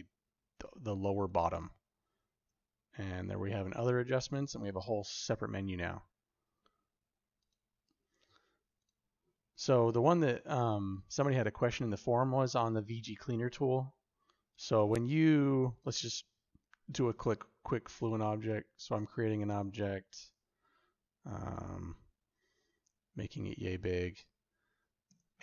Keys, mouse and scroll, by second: 2.1 shift+u, 8.6 click, 16.9 f, 24.9 Tab.